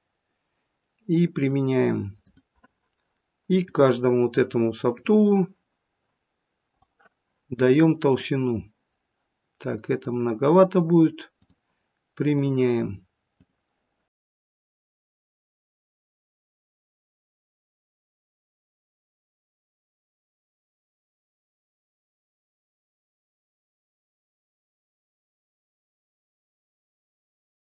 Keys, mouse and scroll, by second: 1.2 click, 3.4 click, 4.8 click, 8.2 click, 10.0 click, 11.3 click, 13.3 click, 14.3 click, 15.2 click, 15.7 click, 16.0 click, 17.7 click, 18.2 click, 18.5 click, 19.5 click, 20.2 click, 20.9 middle click, 21.5 click, 22.3 click, 22.5 click, 22.7 click, 22.8 scroll up 3, 22.9 middle click, 23.3 click, 24.4 click, 25.0 middle click, 25.4 click, 25.7 click, 26.0 click, 27.1 click, 27.7 click.